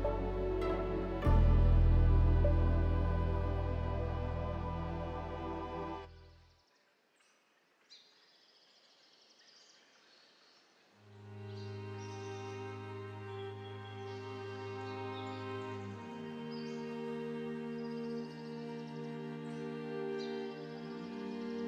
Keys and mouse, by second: 4.3 alt+shift+click.